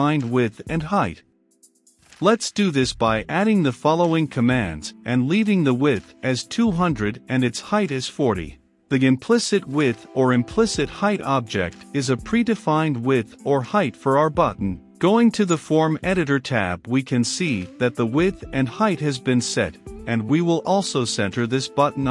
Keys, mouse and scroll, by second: 1.6 Return, 2.7 i, 2.9 m, 3.0 p, 4.0 Down, 4.2 Return, 6.1-6.8 typing, 7.3 Return, 7.7 ctrl+space, 8.3 Return, 10.1 ctrl+s, 13.6-22.1 drag.